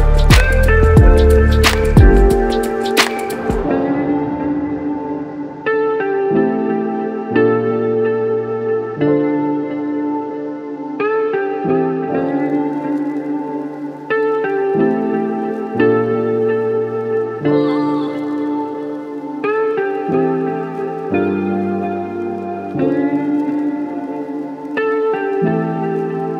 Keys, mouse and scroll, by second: 0.4 x, 9.0 a, 9.0 a, 9.8 8, 12.1 click, 15.1-20.8 drag, 23.7 ctrl+a, 23.7 ctrl+a.